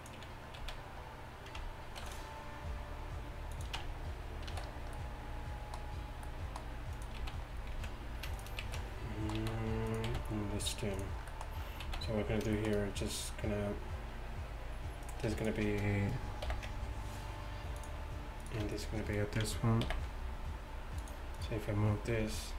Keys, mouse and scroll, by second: 0.6 z, 2.0 ctrl+r, 3.8 Tab, 4.6 a, 7.2-10.1 typing, 11.9 z, 16.6 ctrl+p, 19.7-21.4 right drag, 19.9 ctrl+p, 22.2 g.